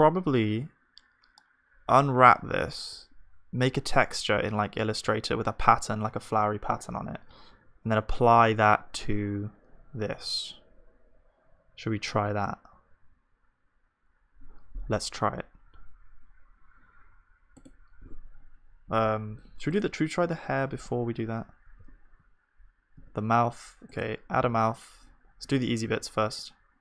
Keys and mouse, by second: 19.7-21.7 drag, 21.8 z, 23.0 z, 24.4 ctrl+d, 24.4-25.9 drag, 25.5 shift+d.